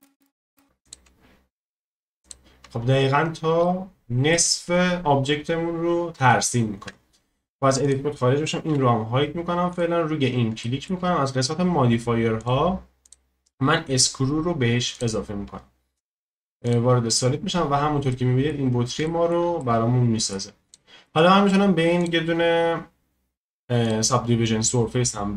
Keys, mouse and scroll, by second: 2.8-3.6 scroll, 3.6 middle click, 8.7 h, 9.7-10.6 drag, 10.6-12.4 shift+middle drag, 12.4-16.1 drag, 16.1 z, 17.1 click, 17.5-17.8 scroll down 1, 17.8 scroll up 2, 18.1-18.6 middle drag, 18.6-19.1 scroll down 1, 19.1-20.6 shift+middle drag, 20.6 scroll up 1, 20.6-25.3 drag.